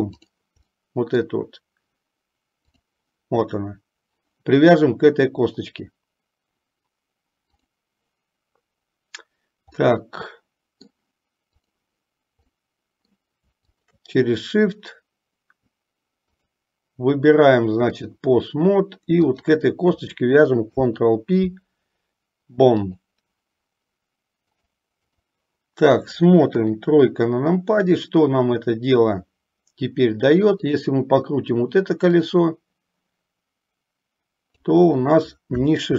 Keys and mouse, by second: 0.9 middle click, 2.7 click, 9.9-11.1 middle drag, 11.7 click, 12.8 middle click, 13.8 shift+click, 16.4-18.3 drag, 19.3 click, 20.8 ctrl+p, 24.8 click, 26.6 KP_3, 30.7 click, 32.3-34.8 drag.